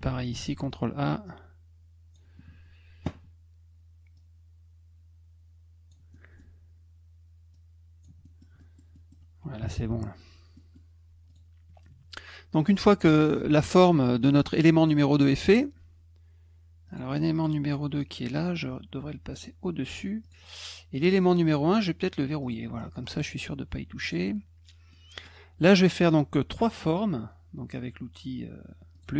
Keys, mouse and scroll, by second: 0.4 ctrl+a, 1.2 click, 4.1-5.9 drag, 6.1 middle click, 7.5 click, 8.2 middle click, 8.6 middle click, 8.9 middle click, 10.5 middle click, 11.3 click, 12.5 middle click, 16.8 click, 17.3 click, 18.0 click, 20.2 click, 20.9 click, 22.4 click, 23.0 click, 24.0 click, 24.9 middle click, 28.9 click.